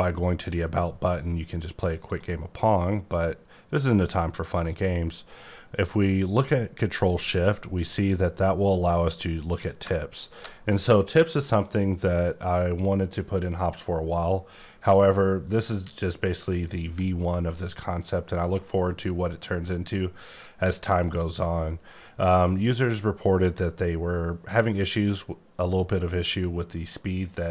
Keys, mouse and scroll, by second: 1.8 scroll up 1, 2.1 click, 3.0 click, 10.1 shift+click.